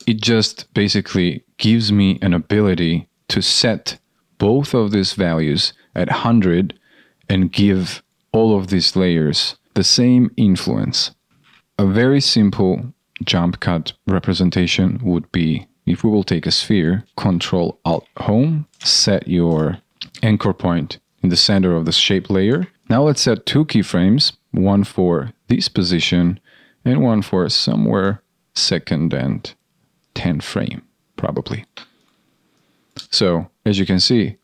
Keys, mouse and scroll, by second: 11.6 ctrl+k, 17.4 ctrl+alt+Home.